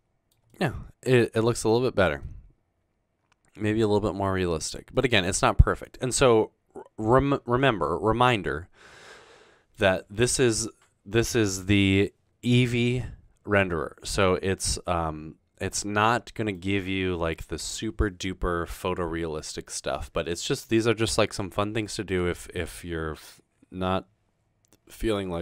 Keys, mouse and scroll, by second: 0.7-1.5 middle drag, 2.2 middle click, 3.9-4.2 middle drag, 4.6 click, 5.2 middle click, 14.0 middle drag, 14.2 scroll down 1, 23.7-24.1 scroll up 2, 24.1-24.9 scroll down 2.